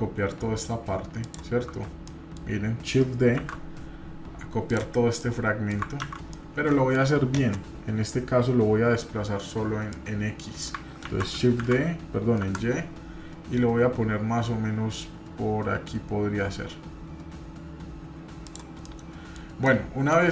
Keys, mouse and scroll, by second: 1.7-2.1 scroll down 1, 2.1 middle click, 3.0-3.4 scroll down 1, 3.4 shift+d, 5.2 middle click, 6.0 ctrl+z, 6.4 middle click, 9.9 click, 11.0 ctrl+z, 11.6 shift+d, 18.8-19.4 middle drag, 19.6 middle click.